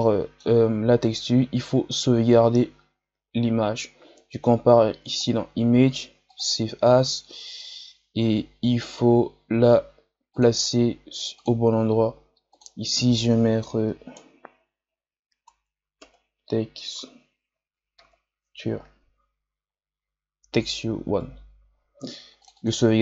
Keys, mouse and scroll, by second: 6.6-22.8 drag.